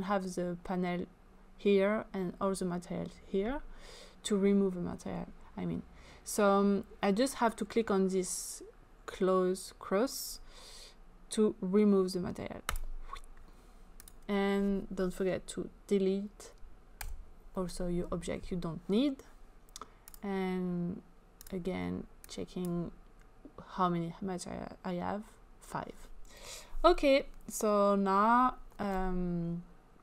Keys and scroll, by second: 17.1 Delete.